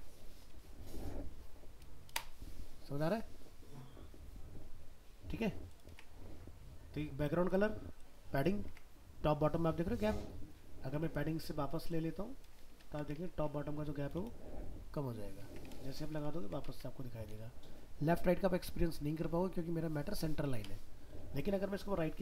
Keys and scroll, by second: 2.1 ctrl+0, 5.9 alt+Tab, 12.6 ctrl+x, 13.2 alt+Tab, 16.1 ctrl+z, 16.4 ctrl+s, 16.7 alt+Tab.